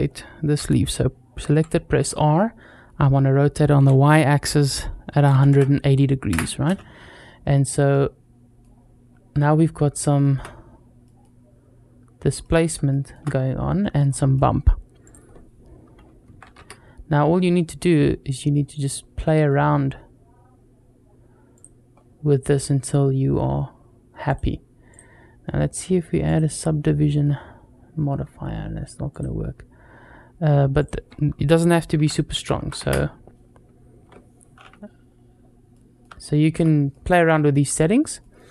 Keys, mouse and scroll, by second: 1.3 r, 7.0-7.3 scroll up 2, 7.4 click, 7.7-8.4 middle drag, 9.2 scroll up 1, 9.5-9.8 middle drag, 10.0 shift+middle click, 10.9 middle click, 12.2 middle click, 12.7 shift+middle drag, 13.9-14.6 scroll up 2, 14.8-17.5 drag, 17.9 scroll down 2, 18.4 middle click, 21.4 click, 21.8 scroll up 1, 24.1 click, 24.7-26.7 drag, 28.9 click, 30.6-33.3 drag, 32.4 KP_0, 35.5 middle click, 36.1 shift+middle click, 36.7 middle click, 38.0 middle click.